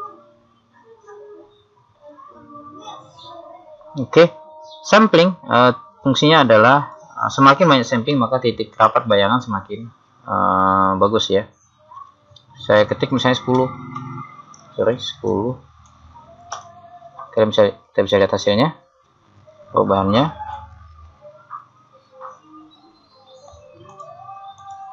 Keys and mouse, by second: 4.1-7.0 middle drag, 7.0 click, 18.4 middle click, 20.1 middle click, 24.1 click.